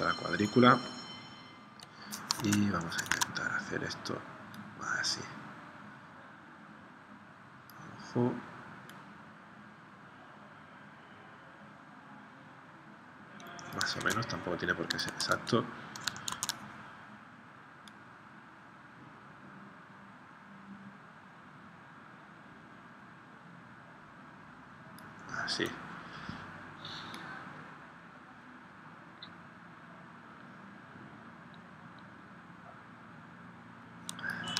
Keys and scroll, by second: 2.4 super+Tab, 14.0 super+Tab, 15.1 super+Tab, 16.4 super+Tab.